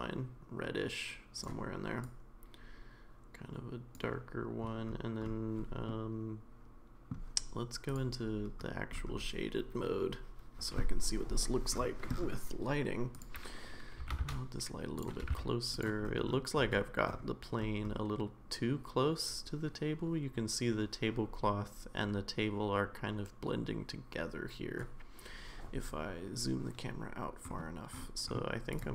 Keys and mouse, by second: 5.9-7.1 middle drag, 7.9 click, 14.0 g, 15.2 g.